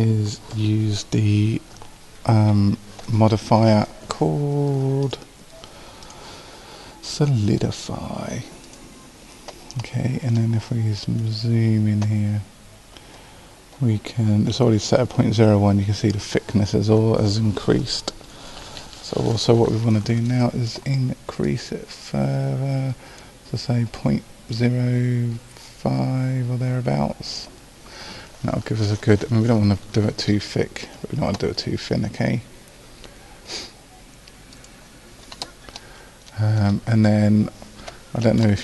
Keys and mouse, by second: 5.0-8.8 drag, 9.8-13.5 drag, 21.5-23.3 drag, 24.6-35.8 drag.